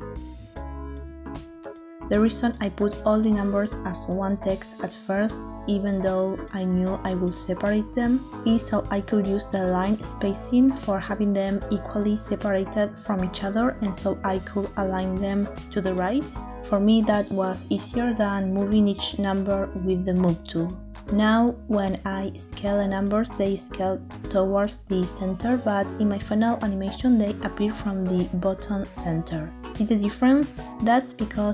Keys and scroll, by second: 5.2 ctrl+j, 14.8 ctrl+j, 17.2 ctrl+j, 18.3 Tab, 23.7 s, 25.3 Escape, 29.4 s.